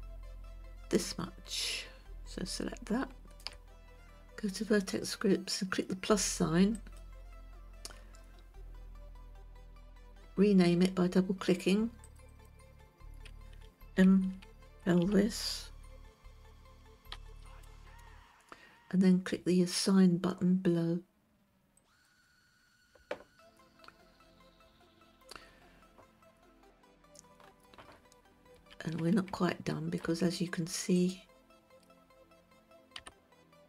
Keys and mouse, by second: 7.2 click, 12.5 click, 12.8-18.5 drag, 22.4 click, 29.1 Tab, 30.0-30.5 shift+middle drag, 31.4 click, 33.5 g.